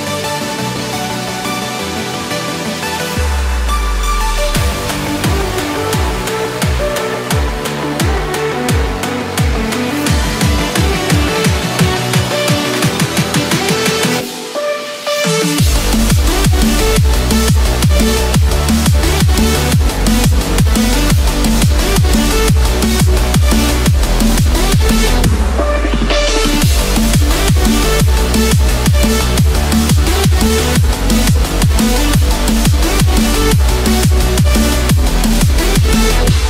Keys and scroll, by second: 16.5 ctrl+=, 33.2 ctrl+-.